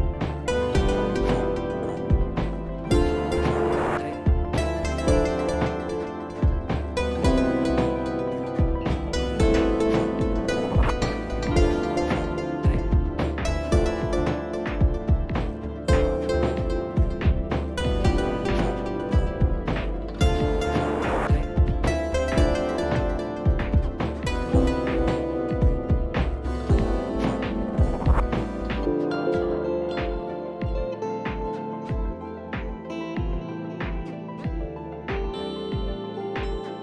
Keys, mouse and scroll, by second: 1.0 click, 2.9 right click, 3.8 click, 7.3 click, 7.4 click, 9.4 click, 11.0-12.7 [, 13.5 click, 15.3 click, 17.2 click, 17.5 click, 17.8 click, 18.0 click, 18.6 click, 18.7 click, 19.0 click, 19.0 click, 19.5 click, 19.6 click, 19.8 ], 20.0 ], 20.0 click, 20.3 click, 20.5 click, 20.9 click, 21.3 click, 21.7 [, 21.8 [, 22.1 click, 22.1 [, 22.5 click, 22.6 click, 22.9 click, 23.0 click, 23.2 click, 23.5 click, 23.6 click, 23.7 click, 23.9-24.3 ], 24.3 click, 24.6 click, 24.7 click, 25.5 [, 25.6 [, 25.9-26.6 click, 26.0 click, 26.8 click, 27.0 click, 27.1 click, 27.2 click, 27.6 click, 27.7 click, 28.4 click, 28.6 click, 28.6 click, 28.8-29.8 click, 29.0 click, 29.1 click, 30.1 click, 30.2 click, 30.9 click, 31.1 click, 31.2 click, 31.3 click, 31.5 click, 31.7 click, 32.2 click, 32.3 click, 32.6 click, 33.3 click, 36.0 click.